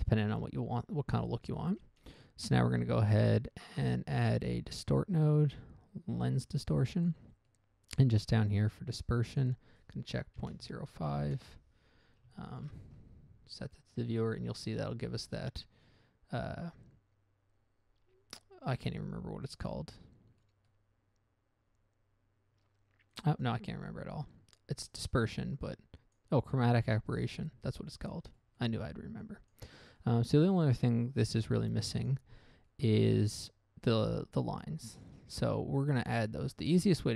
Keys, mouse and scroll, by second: 0.4 middle click, 1.3 middle click, 1.6 middle click, 2.0 click, 2.3 click, 2.8 shift+a, 6.9 click, 7.3 click, 7.4 double click, 7.8 middle click, 8.3 middle click, 9.6 click, 10.8 typing, 11.7 Return, 12.8 ctrl+shift+click, 14.1 middle click, 14.5 middle click, 19.9-20.4 scroll up 1, 20.4 scroll down 1, 20.7 middle click, 21.0 middle click, 23.5 click, 23.8 click, 24.0-24.6 scroll up 1, 24.6 scroll up 1, 25.3 click, 26.5 click, 28.1-28.4 scroll down 1, 28.7 middle click, 28.9 middle click, 29.0-29.6 scroll up 1, 29.6 click, 29.6 scroll up 1, 30.1 click, 30.1 scroll down 1, 30.3 middle click, 30.7 middle click, 31.3 click, 31.6 click, 32.0 click, 32.4 click, 33.0 middle click, 33.4 middle click, 35.0 click, 35.7 click, 36.1 click, 36.4 click, 36.8 click.